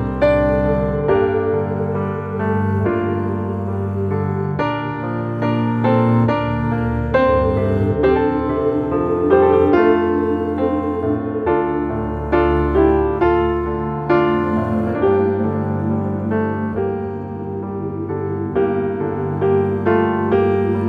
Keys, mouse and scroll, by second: 0.3 scroll up 1, 1.1 g, 2.5 alt+middle click, 3.0 scroll up 3, 3.2 shift+middle drag, 3.5 scroll up 1, 3.7-4.2 shift+middle drag, 4.2 g, 5.1 scroll down 5, 5.3-6.7 middle drag, 6.7 r, 8.3-8.7 scroll down 1, 8.7-9.3 middle drag, 9.3 scroll down 2, 9.6-10.3 middle drag, 10.3 scroll down 1, 10.7-11.2 shift+middle drag, 11.2-11.7 scroll up 1, 11.7-13.6 shift+middle drag, 13.6-15.1 scroll up 1, 16.9 shift+a, 18.6 alt+middle click, 18.8 alt+middle click, 19.3 shift+middle drag, 19.6 s.